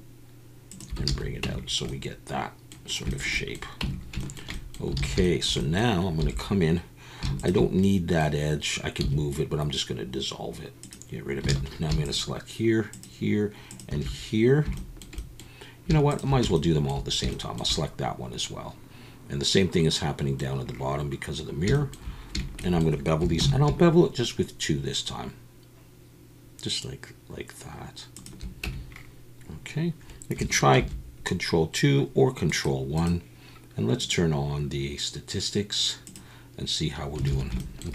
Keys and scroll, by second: 1.1 alt+a, 1.6 Tab, 3.8 Tab, 5.0 alt+a, 6.2 2, 9.0 x, 11.5 alt+a, 23.4 ctrl+b, 28.6 Tab, 30.9 ctrl+2, 37.3 alt+a.